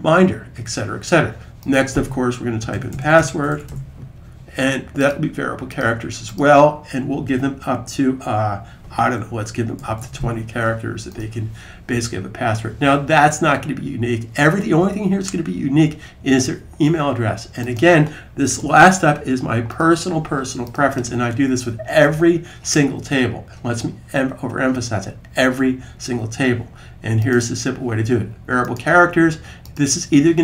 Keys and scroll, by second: 2.4-3.5 typing, 9.4-10.3 typing, 18.4 a.